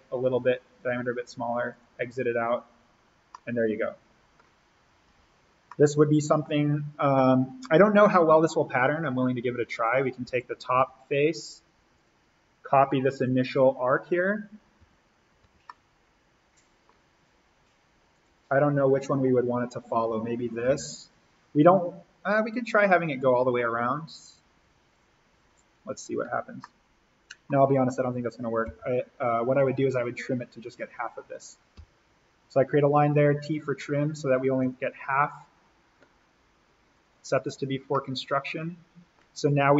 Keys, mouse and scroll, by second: 3.2 scroll up 1, 3.5 scroll, 5.0 alt+v, 5.3-5.6 scroll up 1, 5.6-8.4 middle drag, 8.4-9.8 scroll up 1, 9.8 click, 10.4 alt+s, 10.8 n, 11.9 click, 14.9 alt+v, 15.1-15.4 scroll up 1, 15.4 v, 15.6 middle click, 16.9-18.1 scroll down 1, 18.1 click, 18.8 Delete, 20.6 l, 22.6 Escape, 26.6-28.6 middle drag, 28.6 l, 29.5 click, 30.8 Escape, 31.8 t, 33.4 click, 33.5 click, 34.6 Escape, 35.2 click, 37.9-39.7 middle drag.